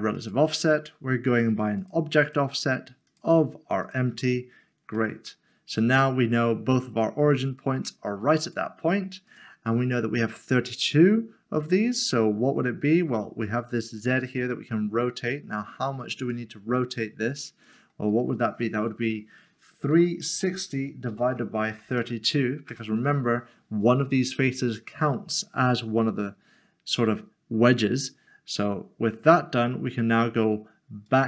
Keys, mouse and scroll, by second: 2.2 click, 3.1 click, 4.9 middle click, 7.4 click, 13.4 click, 19.9-21.9 typing, 22.7 Return, 24.9 middle click, 31.1 click.